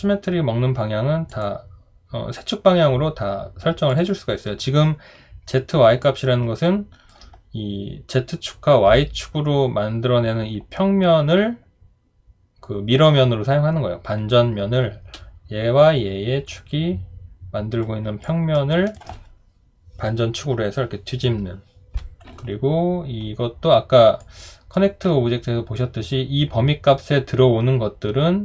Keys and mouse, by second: 6.0 alt+click, 18.2 alt+click.